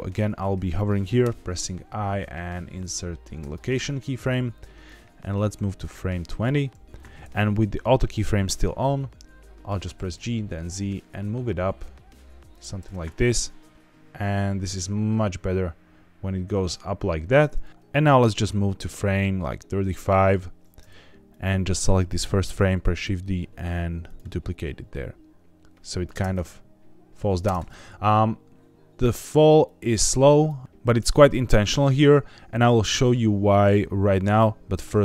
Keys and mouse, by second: 1.1 i, 4.8-6.4 drag, 9.8 g, 10.0 z, 12.4 click, 13.8-17.7 drag, 17.9-20.1 drag, 21.2 click, 22.7 shift+d, 24.0 click, 24.5-26.0 drag, 26.0 space, 29.6 click, 30.6-32.7 drag.